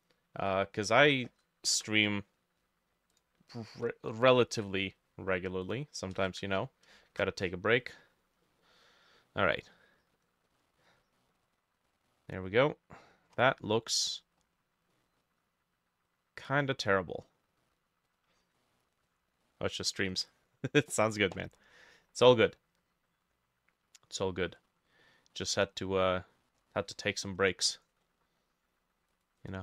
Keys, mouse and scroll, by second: 1.8 Return, 1.8-6.5 drag, 3.8 Delete, 4.5 ctrl+middle click, 4.6 ctrl+z, 6.5 Delete, 7.1 ctrl+shift+a, 7.6 scroll down 1, 8.2-8.5 scroll up 3, 8.5 middle click, 8.7-9.2 scroll down 2, 9.2 middle click, 10.5 middle click, 11.4-11.8 scroll up 3, 11.9 middle click, 13.4-14.0 scroll down 5, 14.0 scroll down 1, 14.1-15.0 scroll up 5, 15.0 middle click, 16.8-17.6 scroll up 2, 17.6 middle click, 18.2 scroll down 2, 18.6 middle click, 19.1-19.5 scroll up 1, 19.5 middle click, 20.3 middle click, 24.1 scroll down 1, 24.5 middle click, 24.7-25.1 scroll down 3, 25.1 middle click, 25.8-26.4 scroll up 2, 26.4 middle click, 29.4 double click.